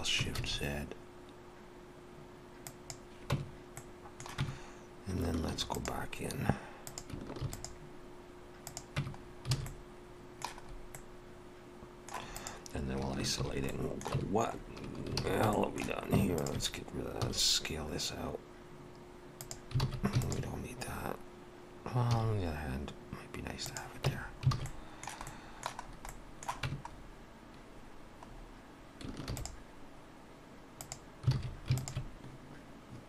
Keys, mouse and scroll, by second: 3.3 Tab, 3.8 middle click, 4.4 Tab, 5.5 ctrl+r, 7.6 ctrl+r, 9.0 Tab, 9.2-9.6 scroll down 2, 9.6 alt+a, 9.7 middle click, 10.7 scroll up 2, 10.9 middle click, 12.4 click, 13.4 shift+h, 13.7 middle click, 14.2 Tab, 14.6-15.0 scroll up 3, 15.2 alt+a, 15.5 shift+middle click, 16.4 alt+shift+click, 17.2 s, 19.8 alt+a, 20.2 alt+shift+click, 22.1 s, 24.1 Tab, 24.2-24.6 scroll down 3, 24.6 alt+a, 24.7 middle click, 25.3 middle click, 25.8 scroll up 2, 26.1 middle click, 26.7 Tab, 27.0 scroll up 1, 28.2-28.6 scroll up 3, 29.3 ctrl+r, 31.4 alt+a, 31.8 alt+shift+click.